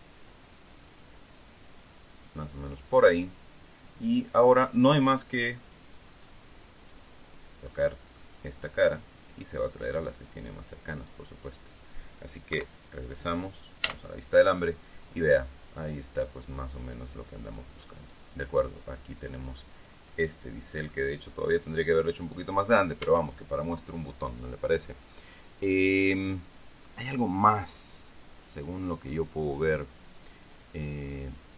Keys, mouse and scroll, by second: 6.4 click, 6.5 middle click, 7.4 right click, 8.3 middle click, 9.4-12.2 drag, 13.1 KP_3, 14.4 z, 23.6 Tab.